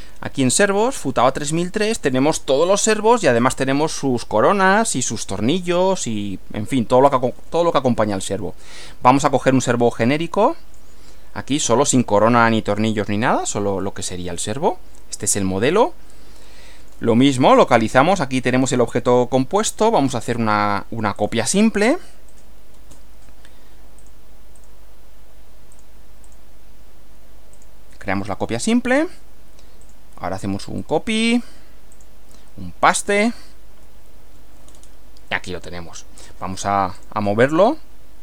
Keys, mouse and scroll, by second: 0.9 click, 9.7-11.0 drag, 14.3-17.1 middle drag, 18.4 click, 21.2 click, 22.3 click, 24.0 click, 24.6 click, 25.8 click, 26.3 click, 27.5 click, 29.8 click, 30.8 click, 31.9 click, 33.2 click, 34.7-35.0 scroll down 2, 35.3-36.4 middle drag, 36.9 click.